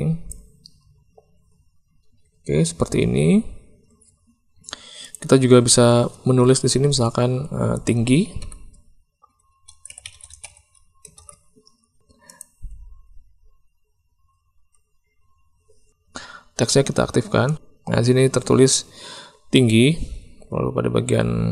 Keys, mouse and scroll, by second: 5.1-12.0 drag, 10.2 g, 12.2 click, 17.4 click.